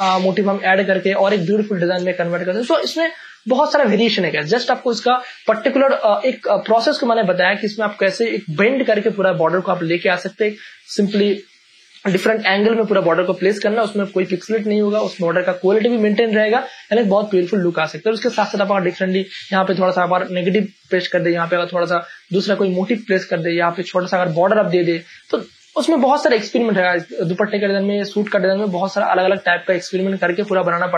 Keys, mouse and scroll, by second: 0.4-1.4 scroll down 1, 1.4 click, 25.4 m, 26.4-30.9 drag.